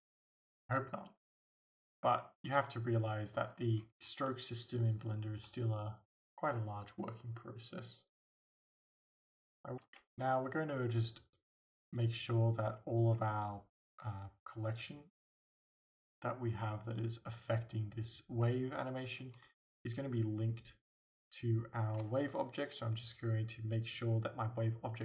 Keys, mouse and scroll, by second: 3.4-3.8 scroll down 2, 3.8 scroll up 2, 4.3-9.9 shift+middle drag, 9.9 alt+a, 11.3-15.4 drag, 19.1-19.6 drag, 19.7-24.3 shift+drag.